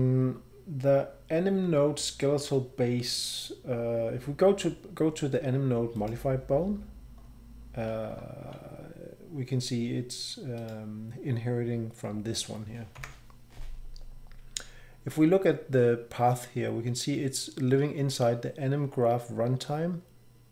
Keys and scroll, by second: 13.0 F12.